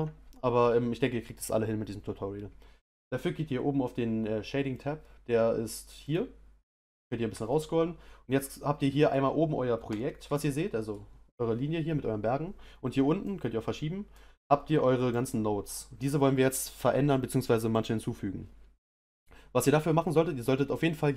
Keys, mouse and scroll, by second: 6.0 click, 6.8-7.5 scroll down 1, 7.5-8.2 scroll down 1, 8.2-8.8 scroll down 1, 8.8-9.9 scroll down 1, 9.9-11.5 scroll down 1, 11.5-12.2 scroll down 1, 12.2-13.3 middle drag, 13.3-21.1 drag.